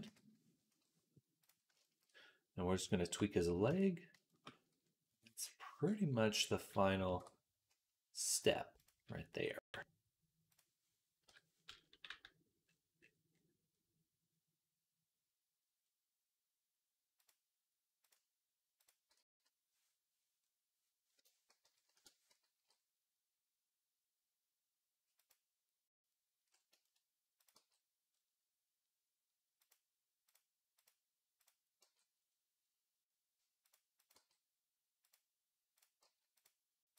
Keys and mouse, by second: 3.6 Tab, 5.8 middle click, 6.9 alt+a, 8.2-36.9 middle drag, 9.3 b, 11.1 o, 11.9 g, 19.0 g, 21.5 g, 22.4 g, 27.4 g, 31.7 g, 34.0 g.